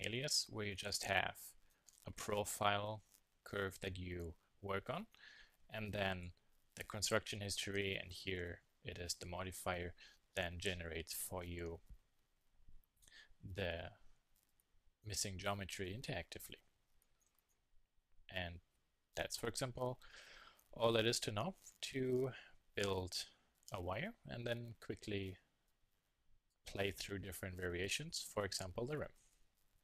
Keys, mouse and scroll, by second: 2.0 s, 3.3 Tab, 3.5 middle click, 3.8 z, 4.1 drag, 4.7-5.3 middle drag, 5.4 middle click, 5.6 middle click, 6.0-6.4 middle drag, 8.7-9.8 middle drag, 9.6 KP_1, 9.8 KP_3, 10.8 middle drag, 18.0-20.8 middle drag, 23.6 KP_3.